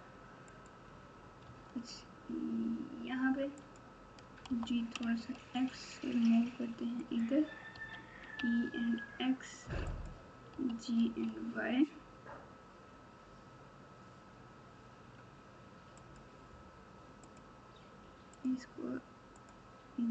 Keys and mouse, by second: 1.4 r, 4.4 g, 7.7 e, 10.5 g, 17.2 click, 18.3 click.